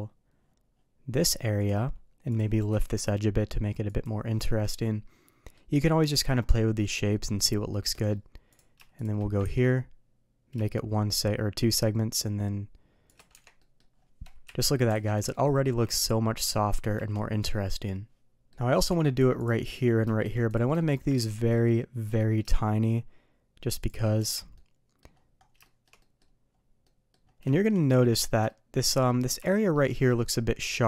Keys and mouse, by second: 2.3 click, 2.5 g, 4.3-5.5 middle drag, 6.1 middle click, 7.9 middle click, 9.0 shift+drag, 9.4 ctrl+b, 13.3 Tab, 13.5 middle drag, 14.4 KP_3, 14.9 alt+a, 15.3-15.6 shift+middle drag, 18.3 middle click, 18.8 Tab, 19.4 click, 19.6 middle drag, 20.7 middle click, 21.1 ctrl+b, 24.1 Tab, 24.5-25.0 middle drag, 25.6 middle drag, 25.9 middle drag, 26.8 middle drag, 27.5 shift+middle drag, 27.8 middle click, 28.4-29.0 shift+middle drag, 29.4 shift+middle drag, 30.0 shift+middle click.